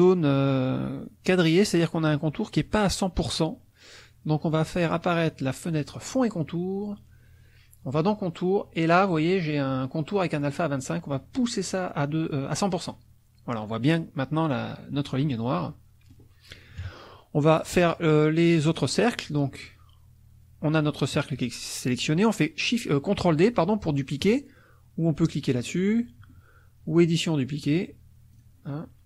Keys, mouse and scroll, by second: 5.7 click, 7.9 click, 11.1-13.0 drag, 15.2 middle click, 15.7 middle click, 16.3-17.3 scroll down 1, 16.8 KP_Subtract, 17.3-18.6 scroll down 1, 18.6 click, 27.0 click, 28.3 click.